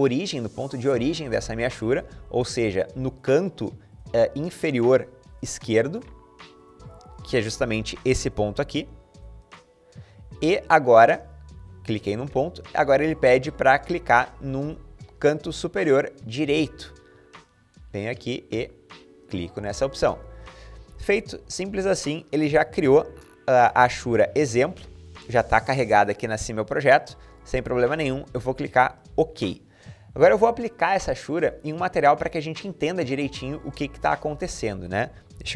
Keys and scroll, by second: 35.2-35.5 typing.